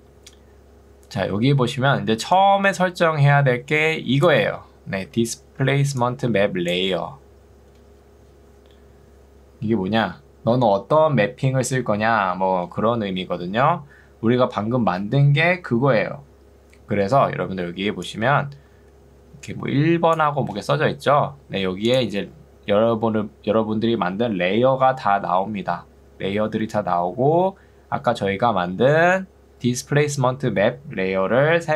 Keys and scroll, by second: 1.4 ctrl+2, 5.2 Escape, 5.8 ctrl+2, 8.0 Escape, 17.6 ctrl+2, 21.2 Escape.